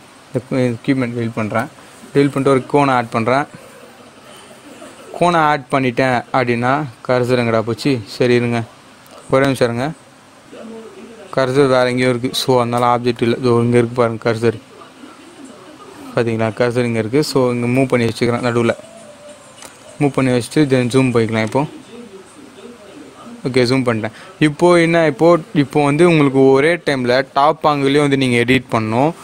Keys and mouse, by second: 0.5 x, 1.5 Return, 2.2 shift+a, 5.3 click, 12.0-17.6 drag, 17.6 g, 19.6-29.2 drag.